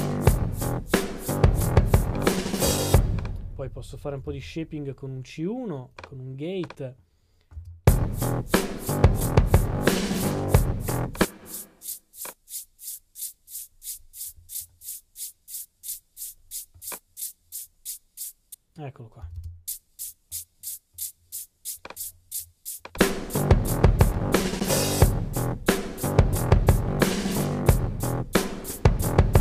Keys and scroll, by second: 4.0-4.8 typing, 5.9-6.6 typing.